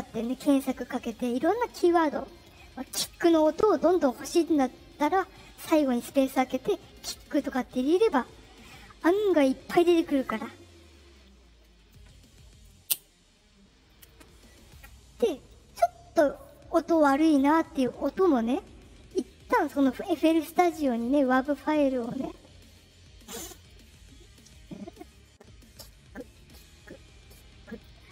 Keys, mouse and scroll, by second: 18.0 click, 19.4 right click, 20.0 right click, 24.8 click, 27.6 click.